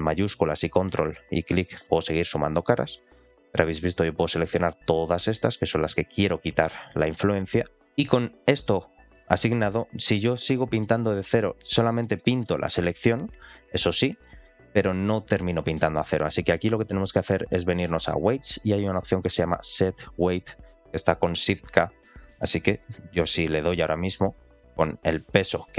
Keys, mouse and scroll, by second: 1.9 ctrl+shift+click, 2.4 ctrl+shift+click, 3.0 ctrl+shift+click, 3.5 ctrl+shift+click, 3.9 ctrl+shift+click, 4.3-5.3 middle drag, 6.0 ctrl+shift+click, 6.3 ctrl+shift+click, 7.1 ctrl+shift+click, 7.8 ctrl+shift+click, 7.8 scroll down 2, 7.9 middle click, 10.9-11.9 drag, 12.1 middle click, 12.6 middle click, 13.1-14.0 drag, 14.1 middle click, 14.6 click, 17.7-24.9 drag.